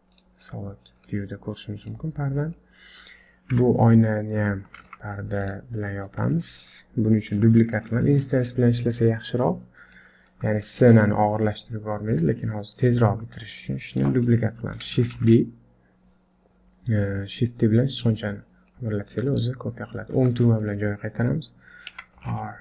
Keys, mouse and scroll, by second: 0.5 middle click, 1.8 click, 2.3-2.6 scroll down 4, 2.6 middle click, 3.5 KP_7, 4.1-4.5 scroll up 6, 4.8 shift+z, 5.6 click, 5.9-6.3 scroll down 1, 6.4 shift+middle click, 7.6 shift+middle click, 10.2-10.6 scroll down 3, 10.6 shift+middle click, 11.0 middle click, 12.1 KP_7, 12.7-13.4 scroll up 4, 13.4 shift+middle click, 15.2 shift+d, 20.0-20.3 scroll up 2, 20.4 shift+middle click, 21.9 r.